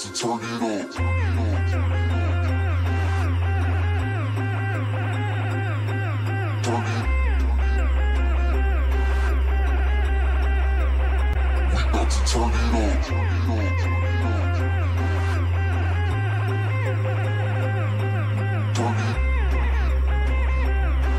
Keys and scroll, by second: 0.8 alt+space, 5.9 ctrl+space, 7.1 i, 12.7 ctrl+alt+space, 16.6 alt+space, 17.6 i.